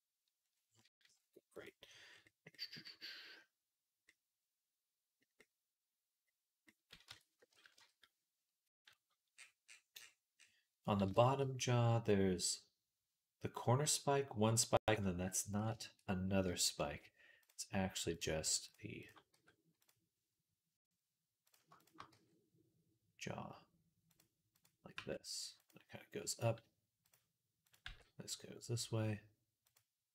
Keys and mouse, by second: 2.4-3.9 drag, 4.0-11.4 drag, 6.9 Tab, 7.6 KP_Decimal, 8.5 KP_3, 15.0-18.0 drag, 18.0-21.6 middle drag, 19.2 x, 21.6 click, 21.8-24.4 middle drag, 22.0 g, 24.4 click, 24.8 g, 26.9 click, 27.7 g.